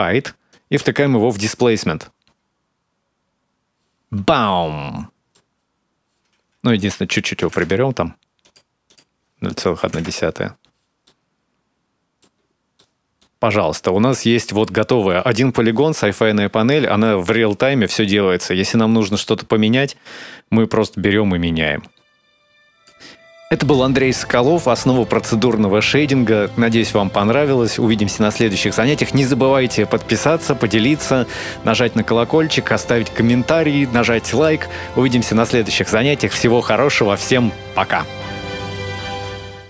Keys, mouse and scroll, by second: 0.3 click, 4.2 middle click, 5.5-6.1 scroll up 1, 6.4 click, 7.2 KP_Decimal, 7.2 KP_1, 7.4 KP_Enter, 8.7 click, 10.8 middle click, 12.2-12.6 scroll down 2, 12.5 middle click, 13.3-13.6 scroll up 1, 14.1-14.6 scroll up 1, 14.6 shift+middle click, 15.7-16.6 scroll down 1, 16.6 scroll down 2, 16.8 middle click, 18.2 scroll up 1, 18.5 middle click, 18.9 middle click, 19.7-20.6 scroll up 7, 20.6 click, 22.9-24.4 scroll down 1, 24.7-25.8 scroll down 7, 25.8-27.4 scroll down 3, 27.4-28.9 scroll down 1.